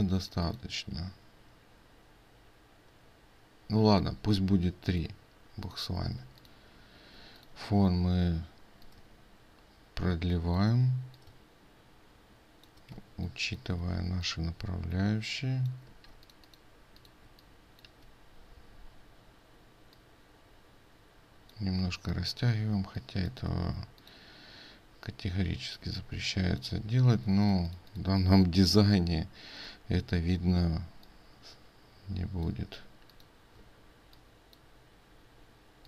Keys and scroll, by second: 13.0 ctrl+space, 22.8 ctrl+space, 27.2 ctrl+space, 33.7 ctrl+space.